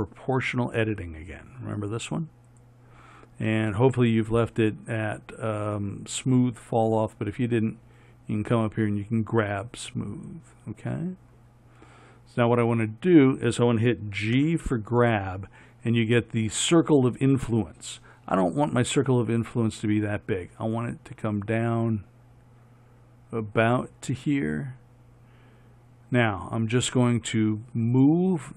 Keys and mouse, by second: 14.6 g.